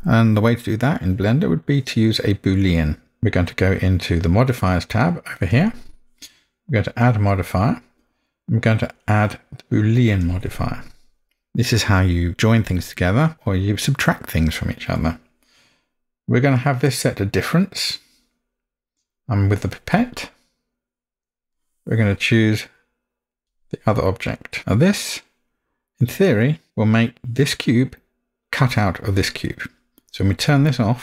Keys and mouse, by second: 0.9-1.6 middle drag, 7.0-10.3 drag, 24.6-26.7 middle drag.